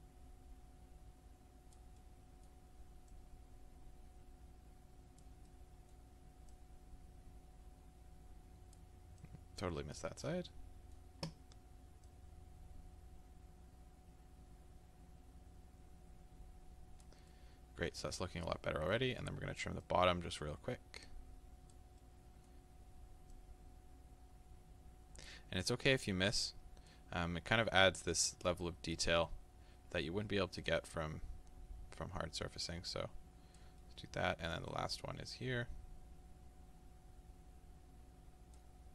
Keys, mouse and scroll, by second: 2.0-3.1 middle drag, 3.1-5.5 drag, 5.5-6.5 middle drag, 6.5-10.5 drag, 10.5-12.1 middle drag, 12.1-17.3 drag, 17.3-19.8 middle drag, 19.8-22.0 drag, 22.0-23.3 middle drag, 23.3-27.2 drag, 27.2-28.6 middle drag, 28.6 click, 29.3-30.6 middle drag, 30.6-33.8 drag, 33.8 middle click, 34.7-38.9 drag.